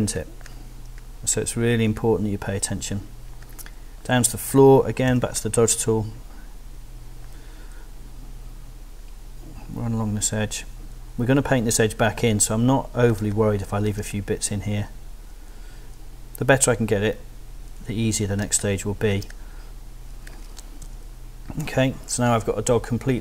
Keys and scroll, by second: 5.1 o, 13.2 space, 18.4 space, 20.8 super+0.